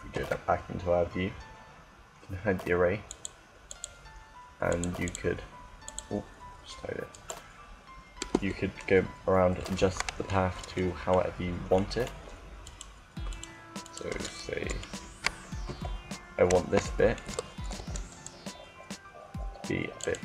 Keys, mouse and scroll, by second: 2.9-7.4 drag, 6.9-8.7 right drag, 8.3 Tab, 9.5-11.7 middle drag, 11.9-13.5 middle drag, 15.3 KP_7, 17.4 KP_7, 17.6 c, 19.8-20.2 drag.